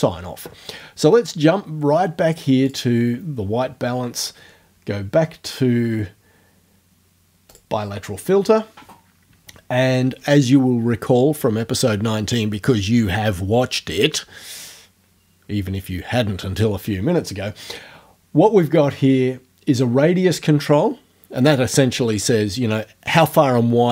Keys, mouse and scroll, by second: 2.7 click, 7.5 click.